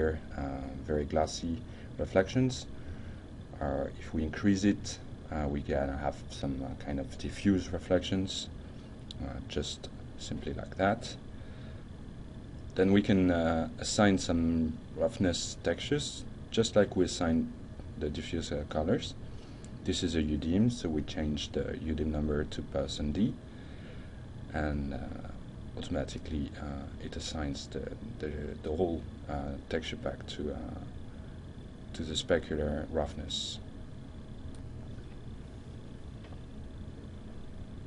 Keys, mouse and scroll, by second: 3.9-5.0 drag, 5.8-6.8 shift+middle drag, 9.3 click, 11.5 alt+Tab, 19.1 click, 19.7-20.8 drag, 21.9 shift+Right, 22.9 d, 23.2 Return, 26.1-26.9 shift+middle drag.